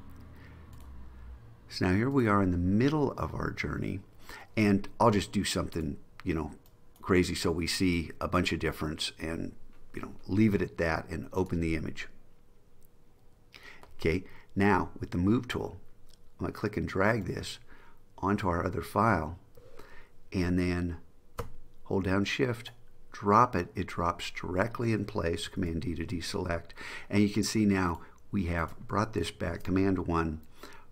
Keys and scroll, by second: 25.7 super+d, 29.5 super+1.